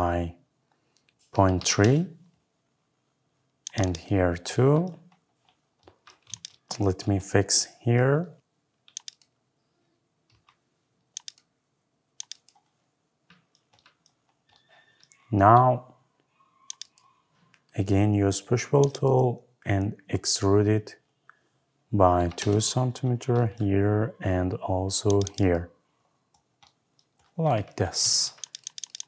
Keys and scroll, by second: 1.7 Return, 18.2 Escape, 22.2 Return, 28.0 Escape.